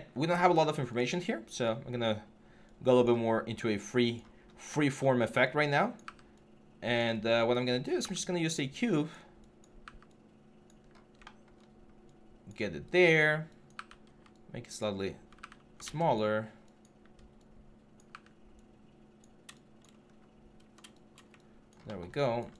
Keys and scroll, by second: 1.3 w, 10.6 w, 13.5 w, 13.8 r, 15.1 ctrl+w, 15.6 ctrl+z, 18.6 w, 19.8 6.